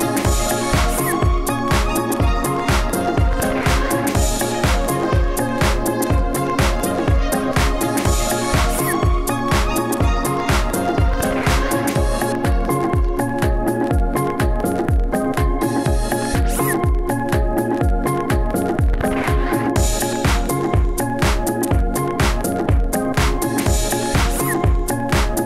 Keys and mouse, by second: 1.5 s, 1.6 f, 2.7 s, 2.8 f, 3.5 Tab, 3.7 Tab, 5.3 s, 8.5-10.0 typing, 11.0 s, 12.3 f, 12.6 drag, 13.0-13.3 drag, 13.3-19.6 typing, 20.3 drag, 20.6 f, 22.2 s, 23.7 Tab, 24.3 q, 24.5 Tab, 25.0-25.3 drag.